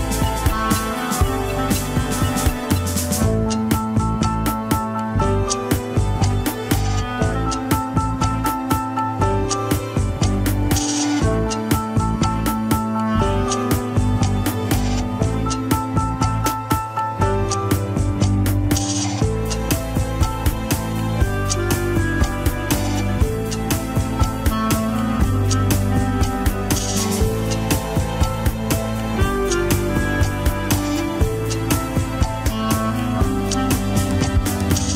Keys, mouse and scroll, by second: 1.0 click, 1.9 middle click, 2.4-2.9 scroll up 2, 2.9-4.6 drag, 4.6 scroll down 1, 4.9-6.1 middle drag, 6.1 ctrl+click, 6.4 middle click, 7.3-7.8 scroll down 6, 7.8 middle click, 8.3-11.1 drag, 11.1-13.1 middle drag, 13.1 click, 13.2 scroll up 2, 14.1-16.7 drag, 16.7 middle click, 17.0 scroll up 1, 17.9 ctrl+click, 18.1 middle click, 18.7-19.4 scroll up 1, 19.4 middle click, 20.2-20.9 scroll up 1, 20.9 scroll up 1, 21.1 ctrl+click, 21.4 middle click, 21.6-22.0 scroll up 1, 22.0 g, 23.9 ctrl+click, 24.0-27.1 middle drag, 27.1 ctrl+click, 27.2 middle click, 27.8 scroll down 2, 27.9 alt+z, 29.4 ctrl+click, 30.0 ctrl+click, 30.3-31.9 middle drag, 31.9 ctrl+click, 32.6 middle click, 32.9-33.3 scroll up 2, 33.1 alt+z, 33.7-34.9 drag.